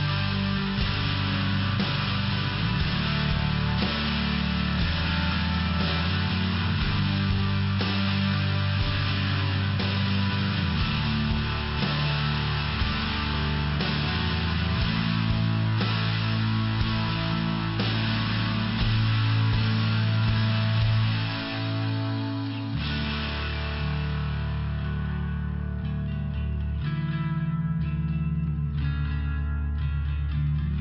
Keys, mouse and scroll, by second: 1.7 click, 2.4 click, 3.4 click, 3.5 click, 4.0 click, 4.6 click, 5.1 click, 5.7 click, 6.1 click, 6.2 double click, 6.6 double click, 7.0 double click, 7.6 click, 8.0 click, 8.1 double click, 8.3 double click, 9.0 click, 9.7 click, 9.8 click, 10.3 click, 11.1 click, 12.8 click, 13.3 click, 15.7 click, 18.1 click, 18.2 click, 18.7 click, 19.4 click, 19.9 click, 20.3 click, 20.9 click, 21.6 click, 22.2 click, 24.9 click, 25.0 click, 25.5 click, 26.1 click, 26.7 click, 27.3 click, 27.9 click, 29.0 click.